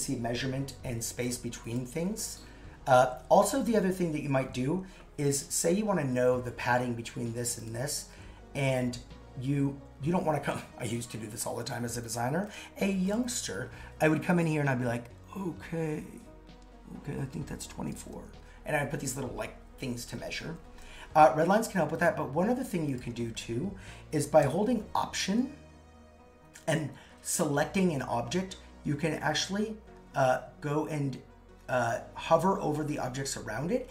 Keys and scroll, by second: 20.4 super+x.